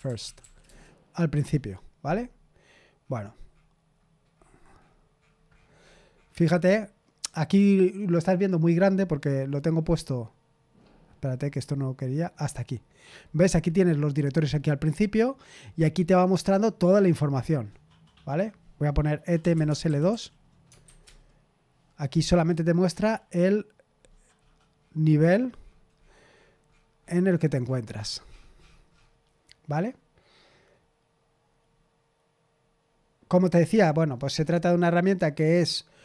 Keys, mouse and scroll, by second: 0.0-0.9 typing, 5.5-6.5 scroll up 2, 6.5-7.5 scroll up 1, 7.5-8.5 scroll up 1, 8.5-12.0 scroll up 1, 12.0-19.4 scroll down 2, 19.1-20.8 typing, 21.0 Return, 24.3 scroll up 2, 30.4-31.1 scroll down 2, 31.1-32.9 scroll down 1, 32.9-34.7 scroll down 1, 34.7-36.0 scroll down 1.